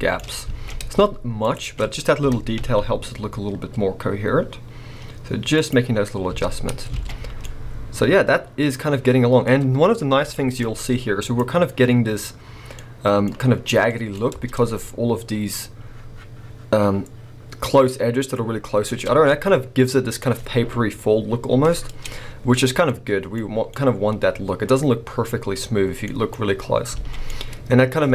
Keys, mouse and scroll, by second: 0.2 scroll up 2, 0.5 alt+a, 1.4 alt+shift+click, 2.2 g, 5.7 click, 6.0 scroll down 1, 6.3 Tab, 6.7-7.3 scroll down 2, 6.9 alt+a, 7.4-11.2 middle drag, 9.5-10.3 scroll up 2, 10.6-11.2 scroll up 2, 11.2 click, 12.7-14.3 middle drag, 13.8 scroll up 2, 14.3 Tab, 19.0 Tab, 19.0-24.3 middle drag, 19.6-19.9 scroll down 2, 26.9 alt+a, 27.1 scroll down 1, 27.3 middle click.